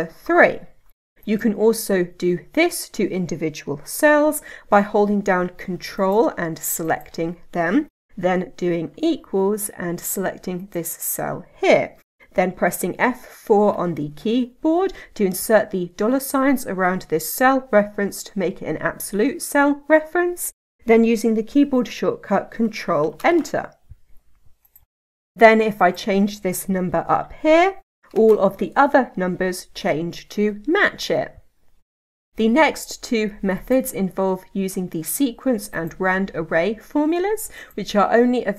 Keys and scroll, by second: 13.4 F4, 23.1 ctrl+Return.